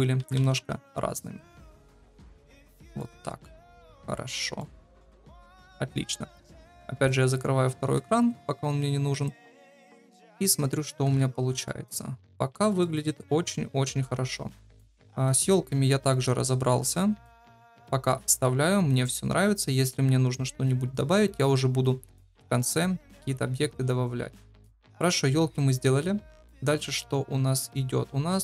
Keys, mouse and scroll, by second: 0.1 s, 1.8 s, 3.9 middle click, 5.2 KP_0, 7.1 click, 8.1 ctrl+s, 10.3 shift+middle click, 11.0 KP_0, 11.6 shift+middle click, 12.5 shift+middle click.